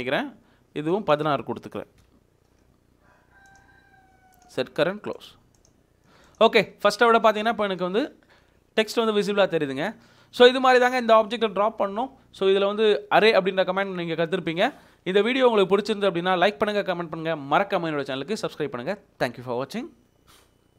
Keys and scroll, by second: 1.6-2.5 typing, 6.5 Escape.